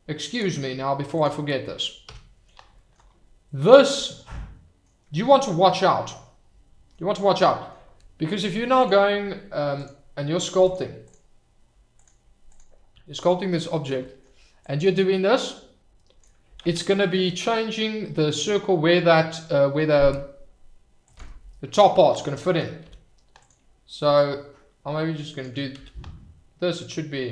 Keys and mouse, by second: 2.1 h, 4.1 shift+click, 4.2-4.7 middle drag, 4.7 click, 5.3-6.9 middle drag, 9.7-10.8 drag, 12.1-13.4 drag, 14.9-16.4 drag, 16.8 ctrl+z, 19.3 click, 22.8 f, 24.1-25.4 drag, 25.8 ctrl+z, 26.6 click.